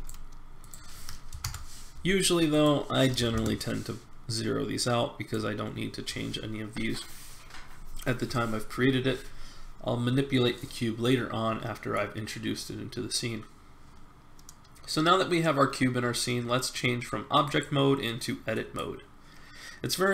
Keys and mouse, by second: 10.3-12.3 middle drag.